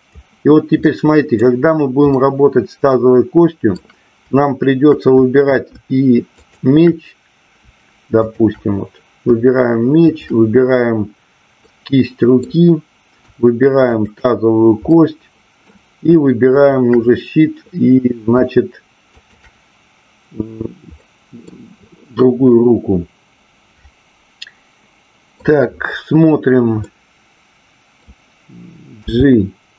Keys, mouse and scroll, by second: 1.2 middle click, 2.1-3.8 middle drag, 6.3-7.0 shift+drag, 8.1 shift+click, 11.7-12.4 middle drag, 14.0-14.7 shift+drag, 14.9-15.7 middle drag, 16.6 shift+click, 19.2-20.5 shift+drag, 20.9-21.4 middle drag, 22.6-25.3 middle drag, 26.8-28.1 middle drag.